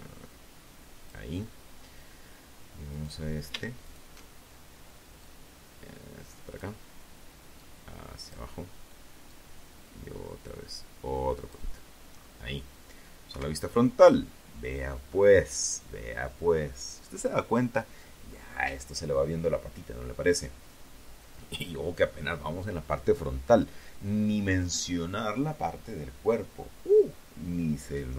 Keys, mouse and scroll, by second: 1.1 right click, 2.0 alt+shift+right click, 3.4-5.0 drag, 5.8 click, 7.4-9.8 drag, 10.3 scroll down 2, 11.4 KP_1, 27.0-27.4 scroll down 2, 27.6-28.0 scroll up 2.